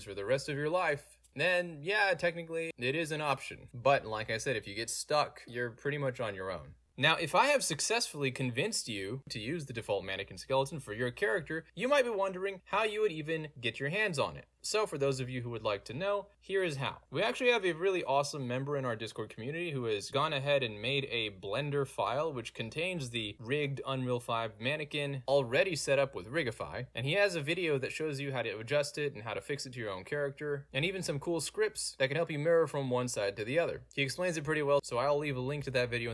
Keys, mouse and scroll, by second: 6.2 d, 10.3 d, 12.0 w, 13.8-17.1 drag, 17.1-18.9 scroll down 2, 17.3-18.9 middle drag, 20.1 click, 21.4-21.9 scroll up 2, 23.0 click, 23.8 click, 24.3 g, 26.8 Escape, 27.2 click, 27.3 click, 27.4 click, 28.8 click, 32.3 click, 34.2 click, 34.7 click, 35.8 click.